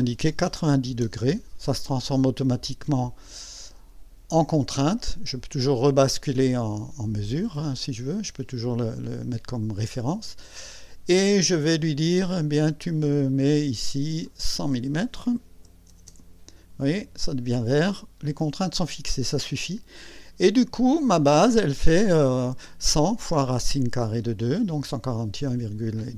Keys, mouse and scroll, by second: 0.8 KP_9, 1.0 KP_0, 1.3 KP_Enter, 3.2-4.1 right drag, 7.5 click, 10.0 click, 14.2 click, 15.5 KP_1, 15.9 KP_0, 17.7 click, 19.0 scroll down 1.